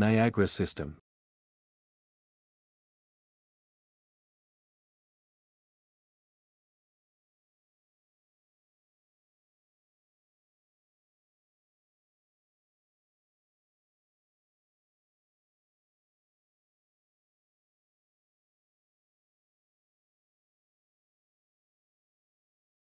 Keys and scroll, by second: 1.2 ctrl+c, 1.2 typing, 1.4 ctrl+v, 12.3-13.4 typing, 16.6-18.0 typing, 19.4-21.9 typing.